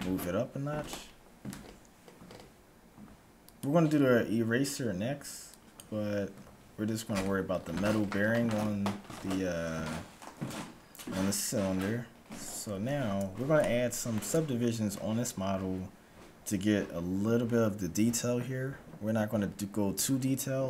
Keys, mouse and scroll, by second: 5.6-7.1 drag, 12.1-15.6 middle drag.